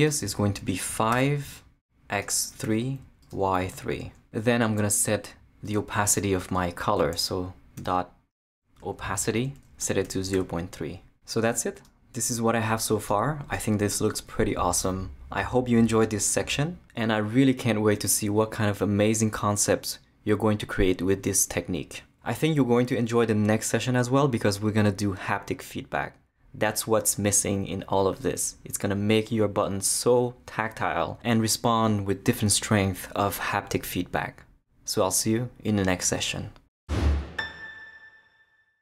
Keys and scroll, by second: 1.1 5, 2.6 3, 7.8-10.8 typing, 9.1 Return.